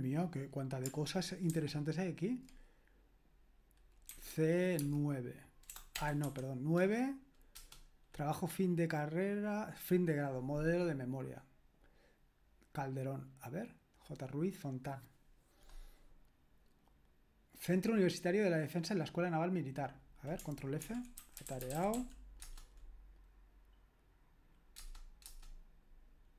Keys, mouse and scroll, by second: 1.5 alt+c, 4.1-6.2 typing, 7.5 Return, 20.9 ctrl+f, 21.0-22.5 typing, 24.8 Return, 25.2 Return.